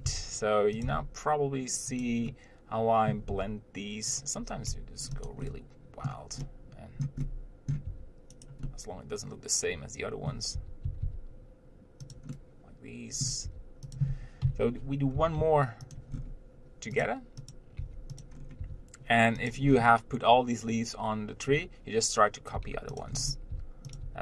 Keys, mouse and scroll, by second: 0.1 scroll up 1, 0.3 s, 1.1 g, 2.5-3.6 middle drag, 3.6 r, 5.0 g, 5.7-8.1 middle drag, 8.1 r, 8.9-10.8 middle drag, 10.8 r, 12.5-13.7 middle drag, 13.7 r, 15.4 g, 16.4-17.3 scroll down 1, 17.3 click, 17.8 click, 18.1 g, 18.6 scroll up 1, 18.8 r, 20.0 scroll down 1, 22.8 g, 23.4 scroll up 1, 23.8 r.